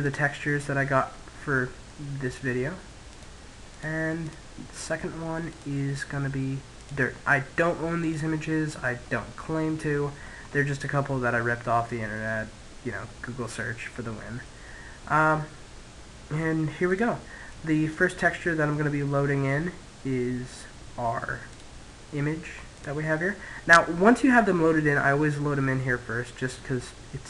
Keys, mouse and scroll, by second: 0.0 click, 1.4-2.9 middle drag, 2.9-5.4 drag, 7.9 click, 9.4-12.3 middle drag, 16.7 click, 18.5 middle click, 21.3 click.